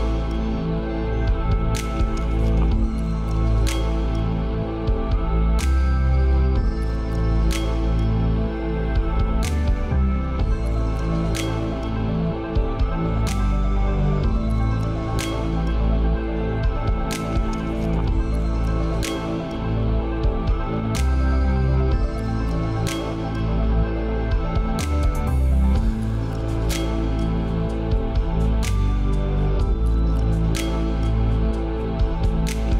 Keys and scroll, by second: 14.7 ctrl+;, 19.2 ctrl+space.